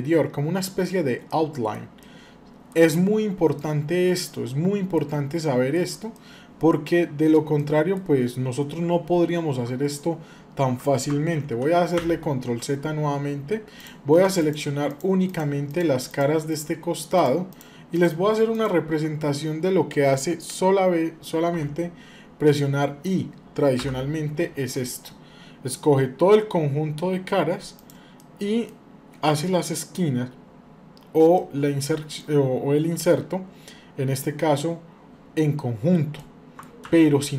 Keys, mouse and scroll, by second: 0.7-1.0 scroll down 1, 1.0 middle click, 1.7 shift+middle click, 2.8-3.3 scroll down 1, 3.3-4.7 middle drag, 5.2 shift+middle click, 5.9-7.1 middle drag, 7.3 shift+middle click, 11.8 ctrl+z, 13.5 click, 14.1-18.7 shift+drag, 21.3 i, 28.0 middle click, 29.1 middle click, 31.1 middle click, 31.9 middle click, 36.0 middle click, 36.6 ctrl+z.